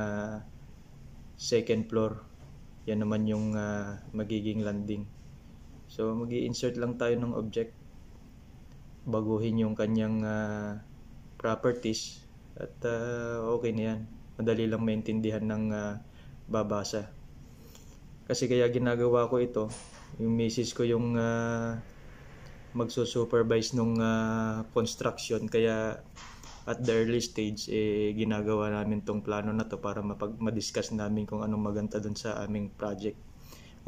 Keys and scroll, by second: 13.1 ctrl+c, 13.2 ctrl+v, 13.5 Down, 13.8 Down, 24.6 ctrl+v, 27.3 BackSpace, 27.4 f, 28.0 BackSpace, 28.2 f, 29.0 ctrl+v.